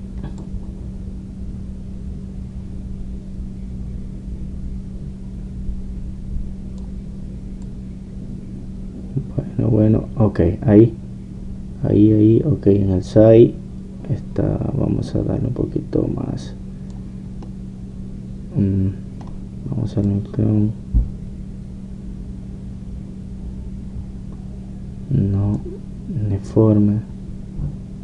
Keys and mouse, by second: 1.5-18.5 drag, 18.5-21.1 middle drag, 21.1-23.0 drag, 27.5-28.0 drag.